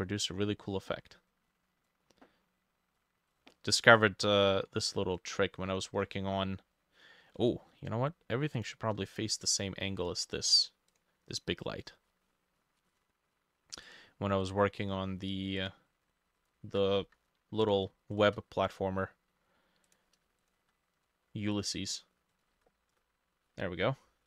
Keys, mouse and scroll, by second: 6.0 scroll down 1, 6.1 middle click, 8.6 shift+click, 11.9-12.6 scroll down 4, 16.6 ctrl+middle click, 17.1 Escape, 17.2 ctrl+c, 17.9 shift+middle click, 18.2 shift+click, 19.0-19.3 scroll down 2, 20.3 shift+middle click, 20.5 shift+click, 22.5-24.2 ctrl+drag, 22.5 ctrl+middle click, 22.6 ctrl+v, 23.0 Return.